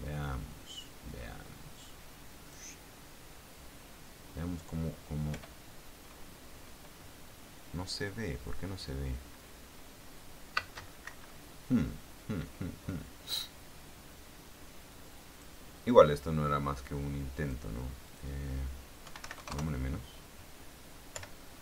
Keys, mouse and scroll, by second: 0.4-2.9 drag, 5.5 p, 11.2 space, 11.2 Escape, 15.1 click, 16.6-17.8 drag, 18.2 click, 19.2 KP_1, 19.4 KP_8, 19.5 KP_0, 19.7 KP_Enter, 21.3 p.